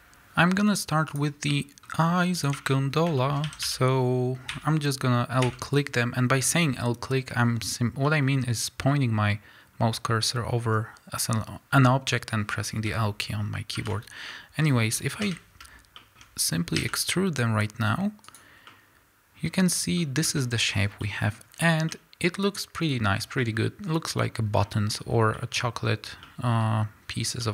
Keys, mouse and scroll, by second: 1.0 click, 1.4-2.3 middle drag, 2.3 click, 2.6 Tab, 2.8 scroll up 1, 3.1-18.3 shift+middle drag, 3.4 a, 4.4 l, 13.9 shift+h, 15.1 KP_7, 16.1-17.0 shift+scroll up 2, 17.0 e, 18.3 click, 18.6-27.5 middle drag, 19.5 scroll down 2, 19.5-20.4 scroll up 4, 20.4 Tab, 20.7 scroll down 2, 21.4-21.8 scroll up 1, 23.2 scroll down 2.